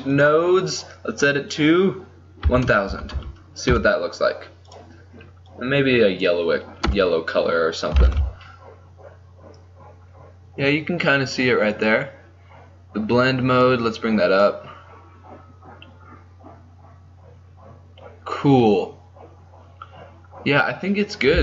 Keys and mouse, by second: 2.9 KP_0, 4.8-6.5 drag, 6.9 KP_0, 8.2 shift+z, 14.0-16.1 drag, 20.3-21.4 middle drag.